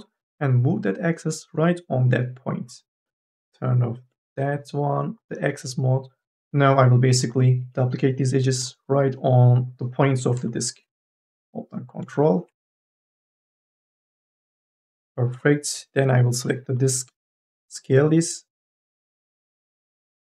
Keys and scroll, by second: 6.3 ctrl+z, 17.2 t.